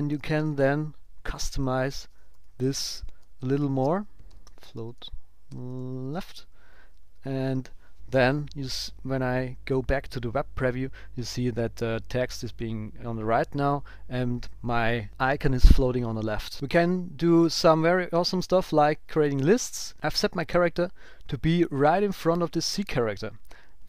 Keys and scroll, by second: 4.6 shift+;, 6.6 super+s, 7.4 ctrl+alt+super+p, 19.9 shift+Right, 20.2 shift+Left.